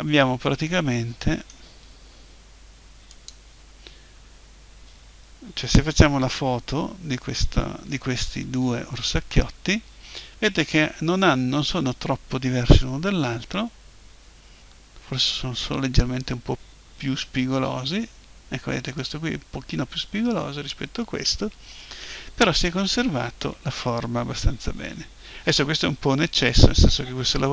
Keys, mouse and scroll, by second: 3.1-5.0 drag, 6.8-14.8 middle drag, 17.0 Tab.